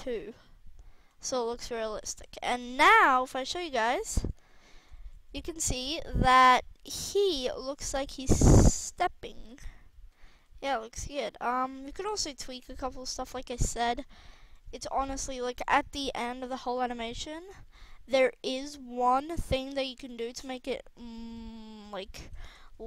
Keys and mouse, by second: 0.9-1.9 drag, 1.9 a, 2.1 a, 2.5 i, 4.0 KP_0, 4.9 alt+a, 6.0 alt+a, 9.3 alt+a, 10.2 alt+a, 13.8-15.8 drag, 16.3 r, 19.3-19.8 drag, 19.8 middle click, 20.2 r, 20.9 click, 21.3-21.8 middle drag, 22.2 a, 22.4 a.